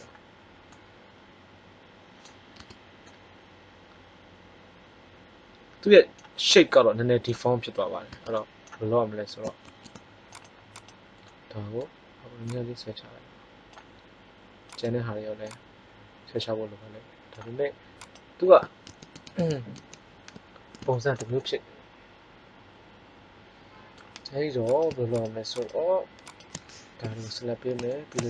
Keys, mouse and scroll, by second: 2.5 Tab, 6.4-7.5 middle drag, 8.0 Tab, 9.6 ctrl+Tab, 10.7 click, 14.6 right click, 15.3-17.1 drag, 18.8 ctrl+z, 19.2 ctrl+z, 19.3 ctrl+z, 19.7 ctrl+z, 20.8 middle click, 26.9 KP_3.